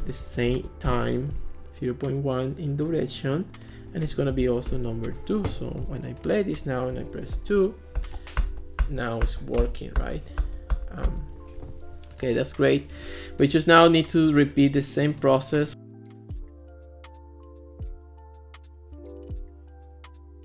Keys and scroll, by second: 0.2-1.0 typing, 4.5 2, 4.7 Return, 7.4 2, 8.0 2, 9.3 2, 10.0 2, 10.7 2, 19.2-20.4 typing.